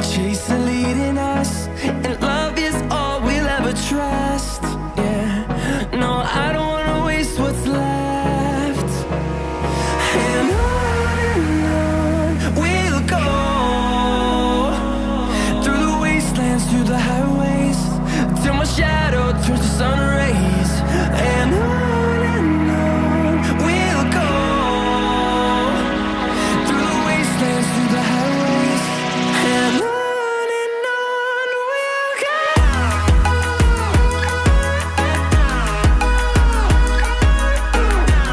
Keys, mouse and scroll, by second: 1.4 double click, 2.3 middle click, 5.5 2, 5.6 0, 6.5 scroll down 5, 7.3 middle click, 7.9-8.3 scroll up 4, 8.3-8.7 scroll down 1, 10.3 middle click, 13.4 scroll down 2, 13.6 middle click, 19.5 scroll down 2, 21.8 scroll down 7, 26.3 middle click, 30.9 4, 31.1 0, 32.2 Return, 33.1 Escape, 33.3 Escape, 33.4-33.7 scroll down 3, 33.7 middle click, 34.8-35.4 scroll up 1.